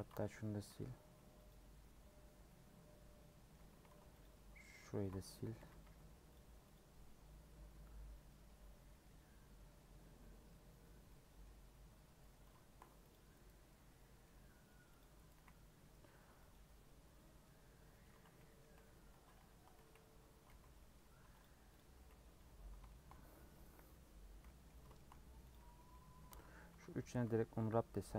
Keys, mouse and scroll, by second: 0.5 a, 1.5 u, 2.4-3.6 middle drag, 3.6 scroll up 1, 4.9 ctrl+x, 5.6 a, 6.7 u, 7.5-10.0 scroll down 1, 10.0-11.0 scroll down 1, 11.0 middle click, 11.4-13.1 scroll up 2, 13.1 click, 13.6-15.0 middle drag, 15.0 click, 15.3 a, 16.5 u, 17.9 middle click, 18.7 /, 19.1 Tab, 19.4 scroll down 2, 19.9 z, 20.4 alt+z, 20.7 middle click, 21.4 click, 21.7 click, 21.9 scroll up 2, 22.3 h, 22.9 shift+middle click, 23.2-23.7 scroll up 2, 23.9-24.3 scroll down 8, 24.4-25.5 middle drag, 25.5 click, 25.7 middle click, 26.2 Tab, 26.3 middle click, 26.6 a, 27.6 u.